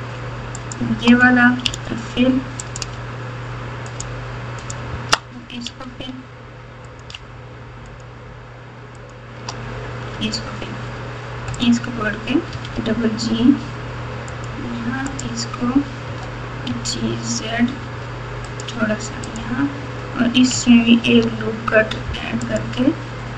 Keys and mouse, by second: 0.5 shift+click, 1.6 f, 5.6 f, 6.8 click, 9.0 shift+click, 10.1 f, 11.5 click, 12.5 g, 15.1 click, 16.0 g, 19.2 click, 20.9 ctrl+r.